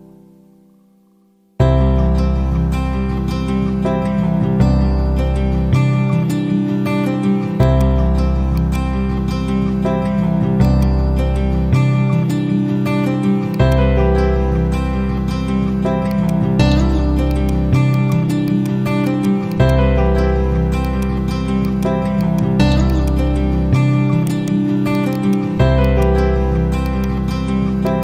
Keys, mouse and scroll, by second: 1.4 typing, 2.7-4.3 typing, 5.3 typing, 7.6 click, 8.8 ctrl+a, 10.6 click, 10.7 ctrl+a, 13.8-15.3 drag, 16.7 typing, 17.2-24.2 drag, 24.2 shift+right click, 24.8 click.